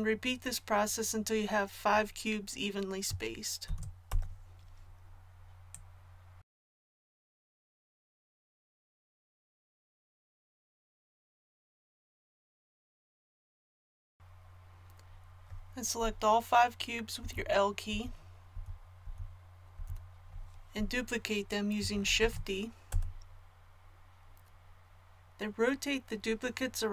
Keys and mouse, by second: 3.6 shift+d, 5.7-7.9 drag, 7.9 a, 8.0 l, 8.3 click, 9.1 l, 9.6 shift+d, 10.1-11.7 drag, 13.7 a, 17.2 l, 17.9 l, 22.2 shift+d.